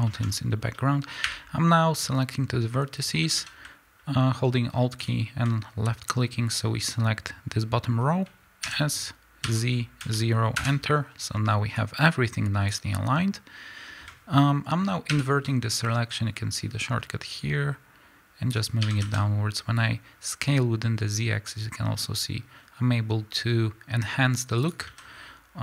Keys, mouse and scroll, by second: 0.1-1.3 middle drag, 1.3 1, 3.2 a, 5.0 click, 8.6 s, 10.6 KP_Enter, 11.8-24.7 drag, 16.1 ctrl+i, 18.8 s, 24.8 a, 25.0 scroll up 1.